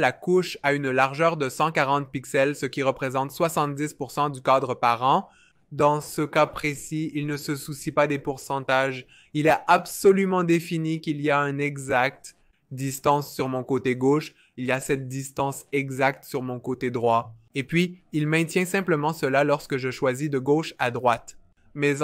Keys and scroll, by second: 10.3 r, 18.3 super+z.